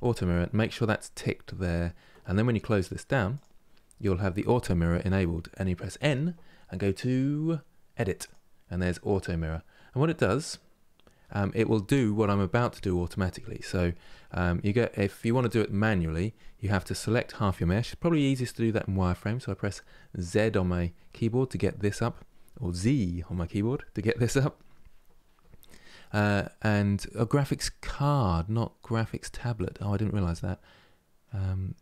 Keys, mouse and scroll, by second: 5.7 n, 7.9 click, 13.6 Tab, 14.1-16.4 middle drag, 16.4 3, 16.8 middle click, 17.7 z.